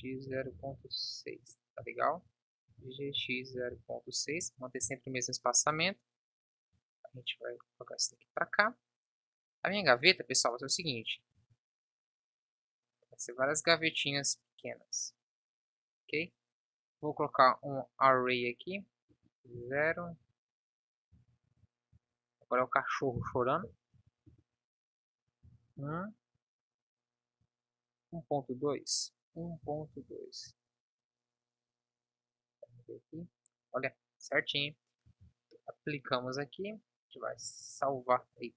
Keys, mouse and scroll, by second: 2.0 shift+d, 2.7 g, 11.0 s, 35.1 z.